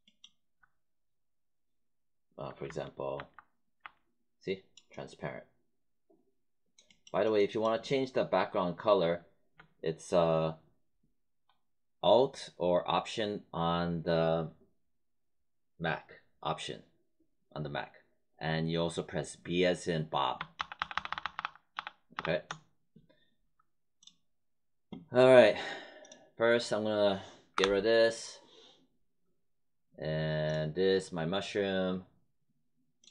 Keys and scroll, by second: 3.1 alt+b, 20.5 alt+b, 27.5 Delete.